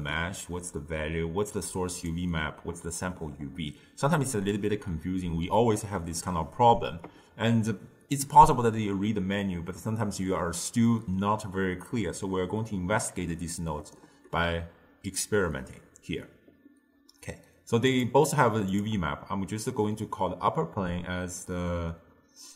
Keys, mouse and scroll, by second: 1.5 click, 17.9 click, 18.8 click.